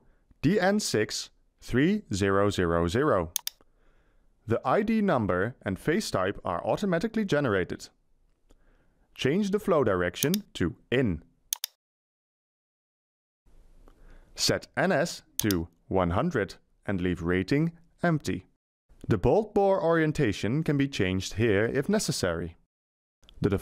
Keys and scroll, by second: 15.6-17.2 typing.